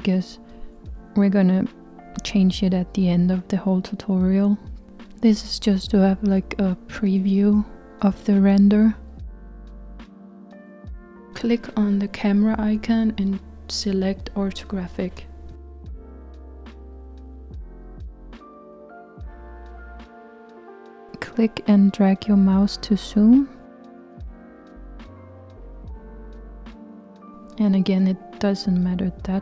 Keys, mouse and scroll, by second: 4.5-6.8 g, 9.9 click, 12.8-24.9 drag, 25.2-29.1 middle drag, 29.1 click.